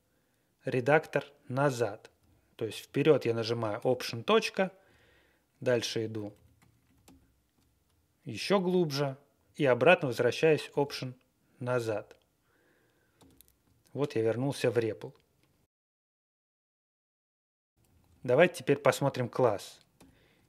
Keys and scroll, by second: 3.7 alt+., 5.0 Right, 5.2 Tab, 5.4 Tab, 5.5 Tab, 5.9 Tab, 6.1 Down, 6.3 Down, 6.5 Tab, 10.7 alt+,, 11.7 alt+,, 13.1 alt+,, 17.7 ctrl+e, 17.8 Left, 18.0 Left, 19.9 alt+..